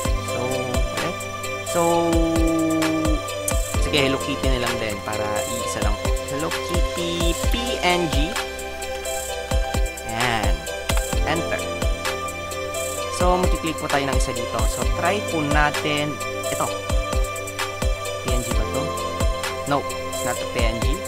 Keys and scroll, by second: 4.6-8.2 typing, 8.4 Insert, 9.6 BackSpace, 11.0 Return.